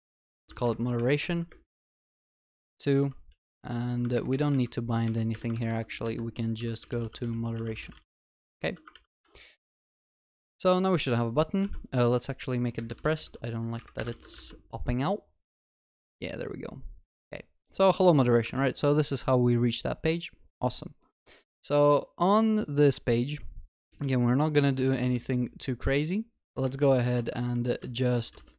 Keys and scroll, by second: 8.4 ctrl+s, 8.6 ctrl+alt+shift+l, 8.9 ctrl+s, 11.7 ctrl+s, 14.0 Return, 14.2 ctrl+s.